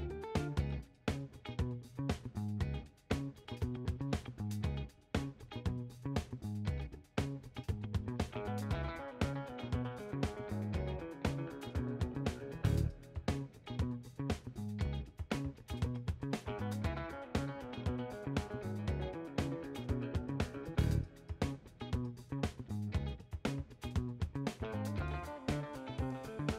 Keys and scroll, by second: 3.9 ctrl+z, 24.8 w.